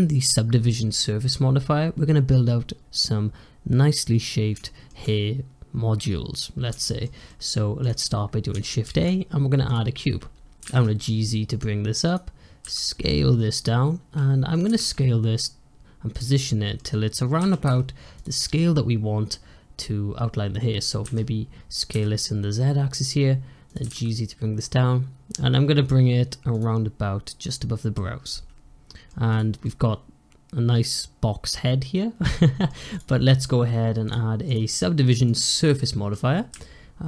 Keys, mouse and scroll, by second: 4.5-8.7 shift+middle drag, 8.7 shift+a, 10.5 g, 12.6 s, 14.6 g, 16.4-17.3 shift+middle drag, 17.3 s, 20.9 s, 23.7 g, 27.8-29.2 middle drag, 29.2 click, 29.5-32.6 middle drag, 32.8 click, 33.9 click, 34.4-35.6 drag, 35.6-36.4 middle drag, 36.4 `.